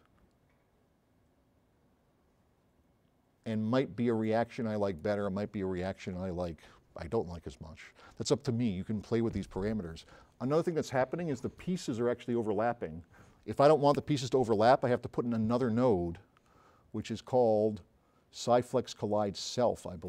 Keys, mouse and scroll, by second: 4.2-4.9 drag, 17.0 click.